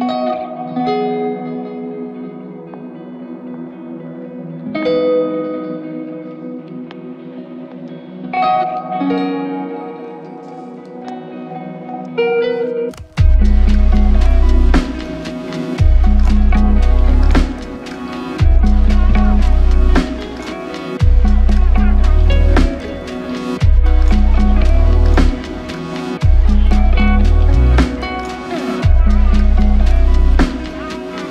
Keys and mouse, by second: 5.3 double click, 22.3 double click, 25.7 alt+click.